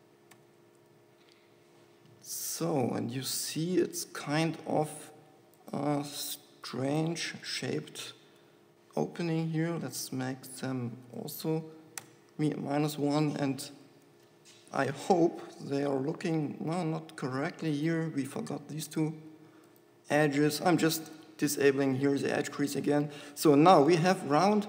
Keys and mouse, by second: 0.0 shift+e, 3.4 a, 8.4 shift+e, 14.6 Tab, 16.8 Tab, 18.1 right click, 20.9 shift+e.